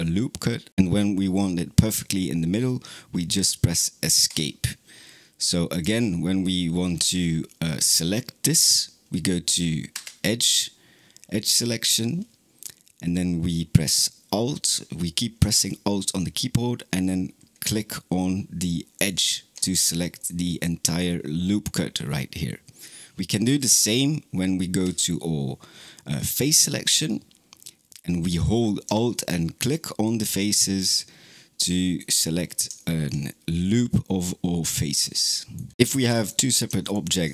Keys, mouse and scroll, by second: 5.5 click, 9.8 2, 18.8 alt+click, 20.0-23.3 middle drag, 23.3 3, 24.7 3, 29.4 alt+click, 30.7-32.2 middle drag, 32.2-32.6 scroll down 3, 32.6-35.7 shift+middle drag, 36.0 click, 36.7 shift+click.